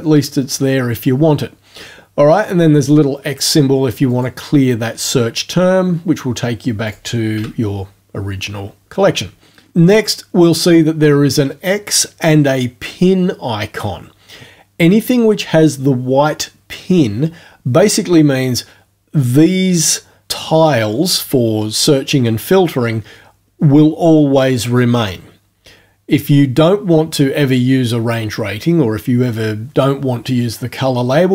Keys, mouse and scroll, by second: 4.1 click, 6.9 click, 7.3 Home.